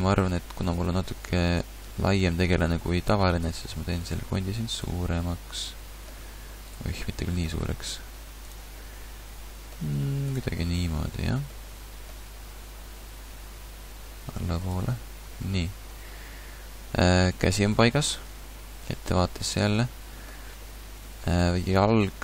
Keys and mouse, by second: 1.9 middle click, 4.3 g, 7.5 g, 9.9 g, 12.3 g, 15.0 a, 15.6 a, 16.6-18.2 middle drag, 18.3 KP_1, 19.3 middle click, 21.5 g.